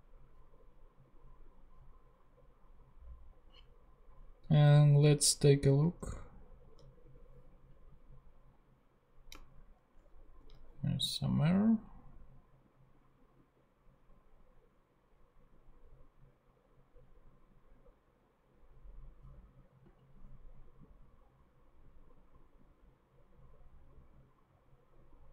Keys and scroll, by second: 5.8 super+Tab, 10.2 ctrl+super+z.